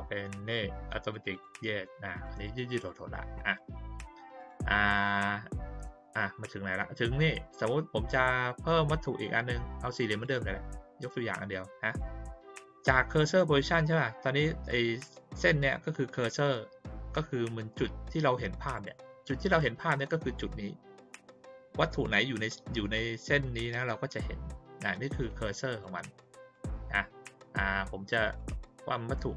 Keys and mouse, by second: 1.1 click, 1.3 click, 2.1 click, 2.7 click, 4.3 click, 10.1 click, 11.2-11.9 drag, 18.7 click, 25.2 click, 25.7 click, 26.0 click, 26.5 click, 28.3 click.